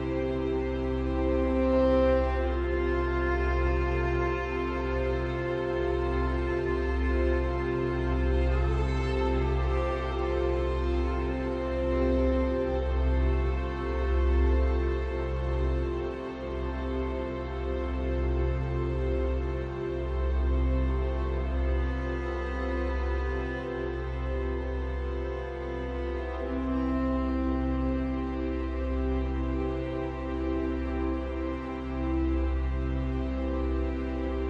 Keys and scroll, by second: 5.3 ctrl+t.